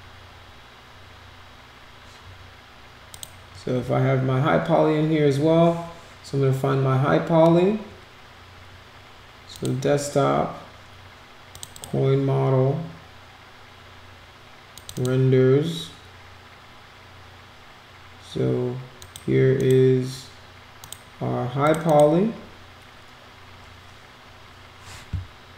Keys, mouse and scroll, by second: 3.1 click, 9.5 click, 11.5 click, 11.7 click, 14.7 click, 14.9 click, 19.0 click, 19.5 click, 20.8 click, 21.6 click, 21.8 click.